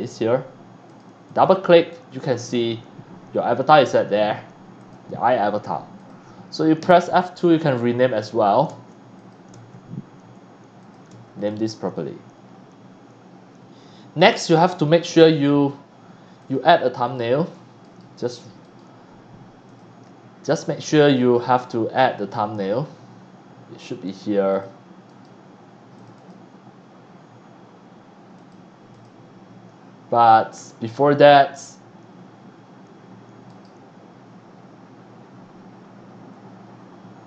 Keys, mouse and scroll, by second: 0.9 click, 1.2 click, 4.8 click, 6.0 click, 8.1 click, 8.6 space, 9.2 click, 9.5 space, 10.8 click, 11.1 space, 11.4 click, 14.7 click, 16.4 click, 17.0 click, 17.9-18.7 right drag, 19.7 click, 21.0-21.4 scroll up 2, 24.0 click, 24.5 click, 26.1 click, 28.3 click, 28.9 click.